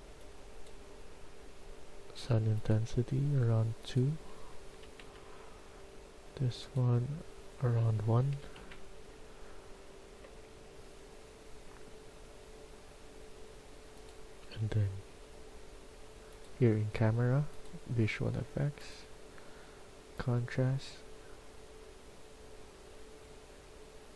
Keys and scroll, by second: 4.6 2, 5.0 Return, 8.3 1, 8.4 Return.